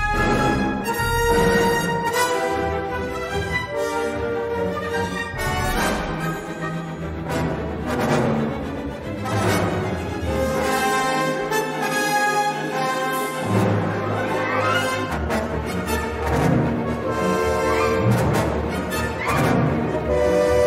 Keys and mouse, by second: 0.8 3, 2.9 g, 8.0 e, 11.8 middle click, 15.3 shift+a.